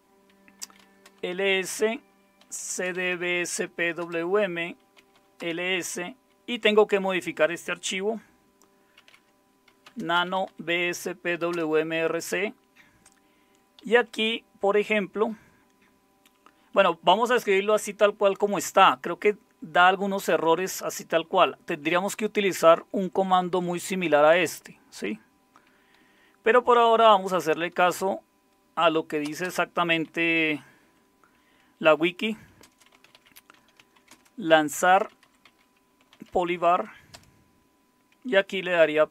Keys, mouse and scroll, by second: 0.0-1.1 typing, 2.2-5.9 typing, 8.7-11.0 typing, 11.5 Return, 13.8 Down, 14.0 Down, 14.1 Down, 21.7 Up, 22.5 Right, 22.7 Right, 23.0 Right, 23.2 Right, 23.4 Right, 23.8 Right, 24.0-25.5 Right, 26.0 Down, 29.2 Return, 29.4 Return, 30.0 Up, 31.9-37.1 typing.